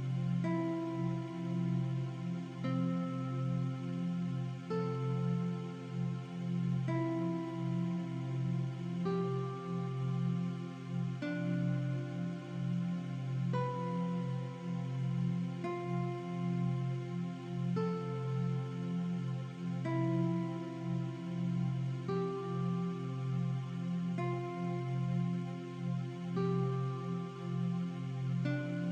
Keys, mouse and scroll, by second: 1.7-2.2 alt+shift+scroll up 2, 3.0 shift+click, 4.4 click, 5.7 click, 7.3 alt+shift+scroll down 1, 8.4 a, 8.4 click, 9.5 Delete, 10.4 click, 11.3 Return, 11.5 i, 11.9 click, 12.2-12.5 alt+shift+scroll down 2, 12.5 v, 12.6 click, 13.7 click, 14.2 alt+scroll down 1, 17.8 click, 18.7 click, 18.9 scroll up 1, 19.2 alt+shift+scroll down 2, 20.0 alt+shift+scroll up 1, 21.7 click, 23.7 click, 27.5 click.